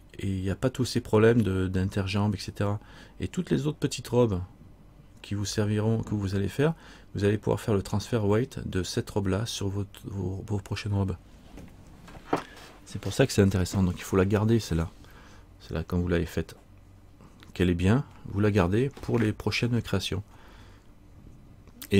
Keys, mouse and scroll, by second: 1.5-4.4 scroll up 2.